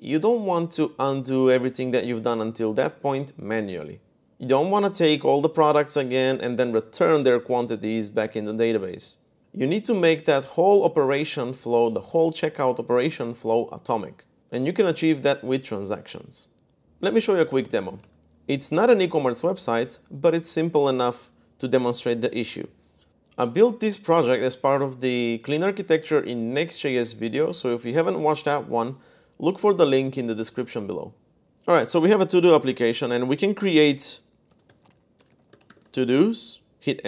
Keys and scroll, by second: 17.8 super+Tab, 34.0-36.4 typing.